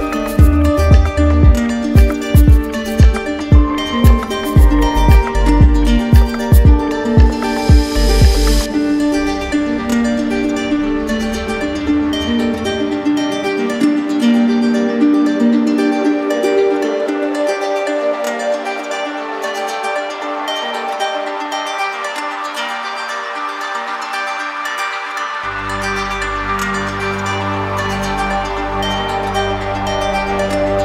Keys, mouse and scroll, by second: 0.2-1.3 right drag, 1.6-2.6 drag, 2.6 right click, 3.3 alt+right click, 10.0 alt+right click, 11.3-12.3 right drag, 12.4 right click, 13.5-14.5 drag, 15.0-16.7 drag, 16.7 right click, 16.7 right click, 17.0 right click, 18.4 right click, 21.6 ctrl+click, 23.8 ctrl+click, 27.0 ctrl+click, 30.4 click.